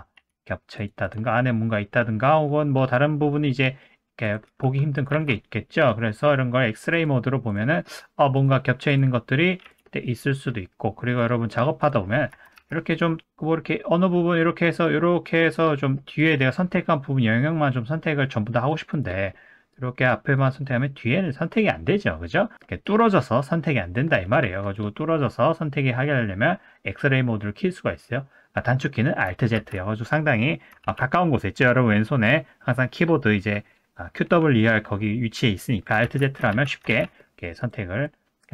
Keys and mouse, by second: 0.2 s, 1.2-2.1 middle drag, 3.5 middle drag, 4.3 click, 4.5 g, 5.1 ctrl+z, 6.9 click, 7.8-8.2 middle drag, 8.3 click, 9.6 typing, 10.1-10.5 middle drag, 11.1 click, 11.5 middle click, 12.3 Tab, 12.6 1, 13.2-14.4 drag, 14.8 click, 15.8 middle click, 16.2-18.7 drag, 19.3 middle click, 19.7 click, 20.6-22.6 middle drag, 22.8-23.9 drag, 24.3 middle click, 24.7 click, 25.0 middle click, 25.8 middle click, 29.6 alt+z, 30.8 alt+z, 36.0 alt+z, 36.5 alt+z, 37.0 alt+z, 37.3 middle click, 38.1-38.5 drag.